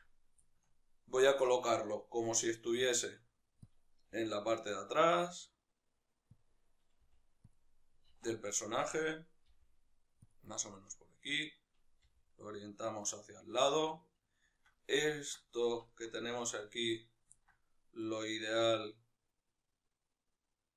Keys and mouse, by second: 0.8 right click, 1.2-3.5 shift+middle drag, 2.5 g, 3.5 click, 4.0 r, 6.2 click, 6.8 g, 7.4 click, 8.0 alt+q, 8.4-10.2 shift+middle drag, 9.3 g, 10.2 click, 10.4 shift+middle click, 11.0 right click, 11.8 g, 13.0 click, 13.7-17.7 middle drag, 17.7-20.7 right drag.